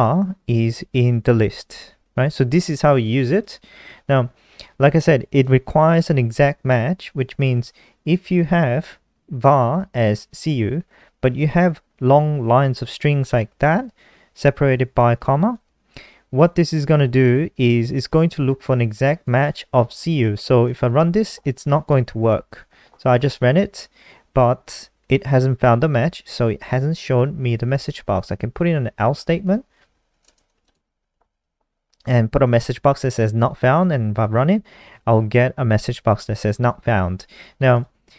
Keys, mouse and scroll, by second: 3.6 click, 5.8 ctrl+c, 6.2 click, 7.5 ctrl+v, 9.8 click, 19.7 click, 21.0 click, 21.3 ctrl+s, 21.8 F5, 28.4-32.0 typing, 29.8 Return, 32.4 click, 34.0 F5, 38.0 click.